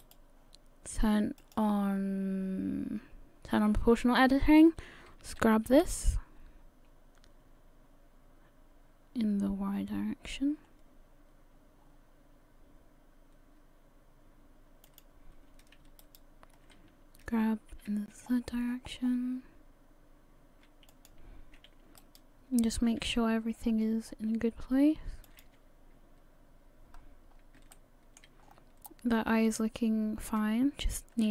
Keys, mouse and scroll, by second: 0.0 right click, 1.4 click, 5.3 g, 16.0 alt+right click, 17.2 g, 22.0 right click, 23.0 g, 25.9 scroll down 1, 27.0-27.3 scroll up 1, 27.3-27.7 scroll down 2, 27.7 shift+middle click, 28.4-29.0 scroll up 5.